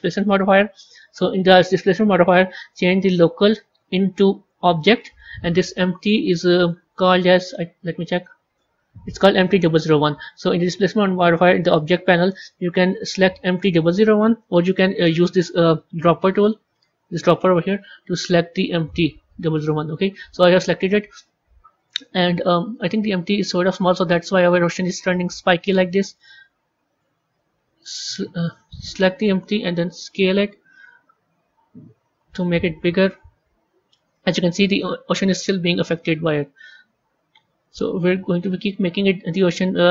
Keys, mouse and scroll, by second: 3.0-6.0 drag, 6.5 click, 8.0 click, 8.4-9.5 scroll down 3, 10.2 click, 12.8-15.9 drag, 17.2 click, 23.9-27.0 middle drag, 28.3 click, 29.7 s.